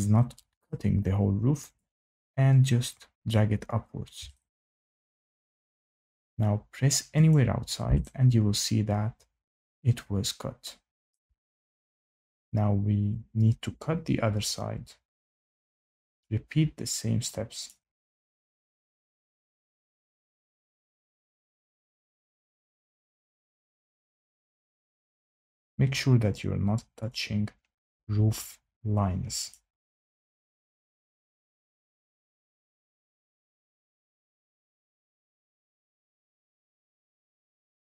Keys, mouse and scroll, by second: 0.0 shift+middle click, 0.0 click, 0.6 shift+middle click, 3.2 click, 5.1 shift+right click, 5.4 shift+scroll, 6.0 scroll, 7.3 click, 11.0 shift+right click, 12.4 click, 14.2-14.7 scroll, 16.1 click, 16.6-17.3 scroll, 17.6 click, 18.3 click, 19.4 click, 19.7 scroll, 20.6 click, 21.6 click, 21.9-23.0 scroll, 23.0 click, 23.0 scroll, 24.7-25.2 scroll, 25.9-26.3 scroll, 27.0 click, 27.4-28.4 scroll, 29.4 click, 30.9 click, 32.2-33.0 scroll, 33.0 click, 34.0 click, 34.5-35.5 scroll, 37.5 click, 37.9-38.0 scroll.